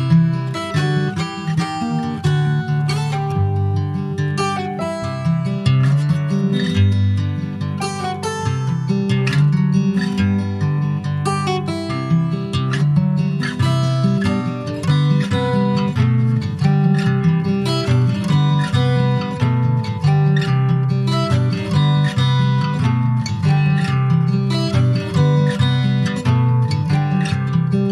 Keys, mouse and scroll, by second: 2.7 middle click, 3.3 e, 3.7 alt+s, 6.4 Tab, 6.7 click, 7.0 middle click, 7.6 ctrl+s, 7.7 click, 9.0 ctrl+1, 10.2 click, 10.6 scroll down 2, 11.2 ctrl+s, 11.5 click, 12.0 /, 12.6 click, 13.0 scroll down 4, 13.3 middle click, 13.5 scroll up 1, 13.9 shift+middle click, 14.3 scroll down 1, 14.5 middle click, 15.1 click, 15.3-18.7 shift+middle drag, 18.7 ctrl+s, 18.8 middle click, 19.1-19.8 scroll up 2, 19.8 click, 20.1 Tab, 20.4 middle click, 20.6-20.9 scroll up 2, 20.9 shift+middle click, 21.4-22.3 shift+scroll up 2, 22.3-23.3 shift+middle drag, 23.3 3, 23.7 click, 24.9 alt+shift+click, 25.9 shift+click, 26.4-27.9 middle drag.